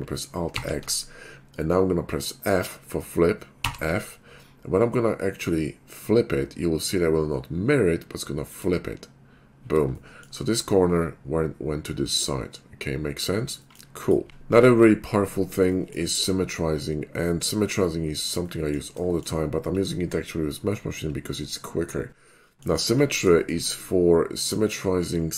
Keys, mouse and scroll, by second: 0.5 alt+x, 6.7 f, 8.6 click, 10.1 shift+middle drag, 13.6 middle drag, 14.0 click, 14.6 Tab, 15.9 shift+middle click, 18.5 middle click, 22.4 middle click, 23.0 Tab, 24.4 click.